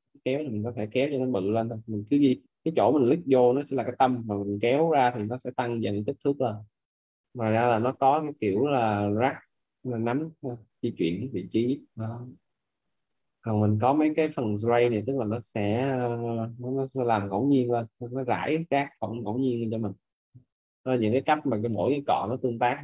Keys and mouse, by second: 0.9 ctrl+z, 1.1 click, 2.1 ctrl+z, 2.7 click, 6.3 ctrl+z, 6.8 click, 12.6 ctrl+z, 13.1 click, 19.7 ctrl+z, 20.9 click.